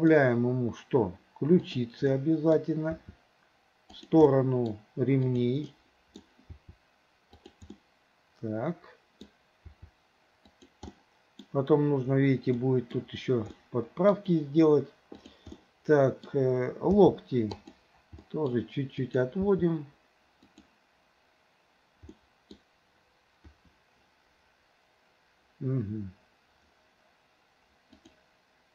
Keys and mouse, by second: 2.2-2.6 middle drag, 3.0 r, 4.4-4.7 middle drag, 5.3 click, 5.7-6.2 middle drag, 6.6 r, 7.8-9.3 middle drag, 9.7 r, 11.0-11.5 middle drag, 12.6-13.0 middle drag, 13.6-14.2 middle drag, 15.3 click, 15.6-16.3 middle drag, 17.0 g, 18.3 middle drag, 19.0 click, 19.5 g, 22.2-22.6 middle drag, 23.5 KP_1, 28.1 click.